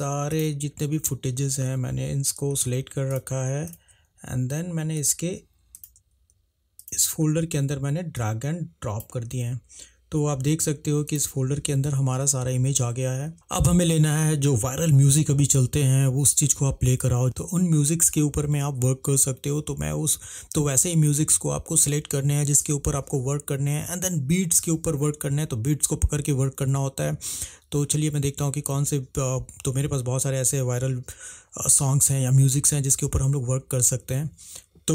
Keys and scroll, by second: 34.6 =.